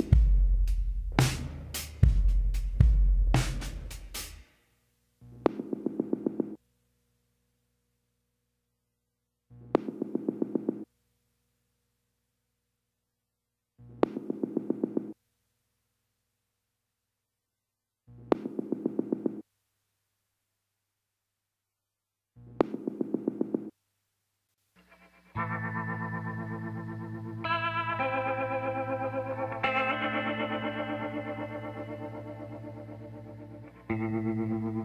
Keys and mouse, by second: 2.0 click, 3.4 e, 10.4 e, 16.9 ctrl+KP_Add, 18.5 s, 22.5-24.3 drag, 23.3 b, 27.4 e, 30.3 s, 33.9-34.8 middle drag.